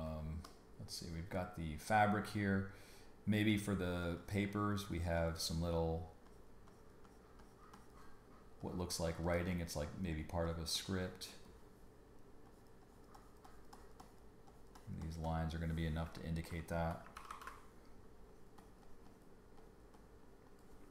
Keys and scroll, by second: 0.1 space, 17.1 super+-.